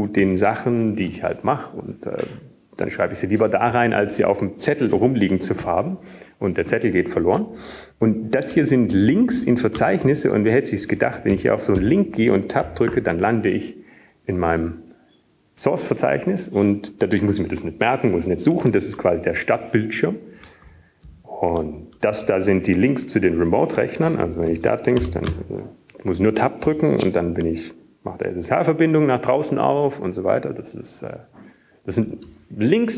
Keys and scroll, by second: 0.2 Down, 0.4-1.3 Down, 2.4 Up, 2.4 Tab, 3.9 Tab, 6.0 typing, 8.5 Tab, 10.0 typing, 12.4-14.1 typing, 14.2 Down, 14.7 Right, 16.0 Tab, 25.0 Down, 25.0 q, 26.1 Down, 27.0 Down, 27.7 Down, 27.7 Up, 28.0 Up, 28.7 Up, 28.7 Tab.